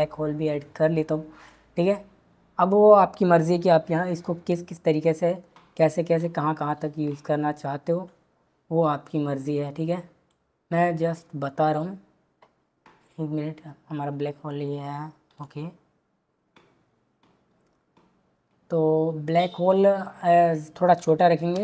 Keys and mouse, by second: 4.3 s, 8.8 click, 15.3 s, 20.9 g, 21.5 z.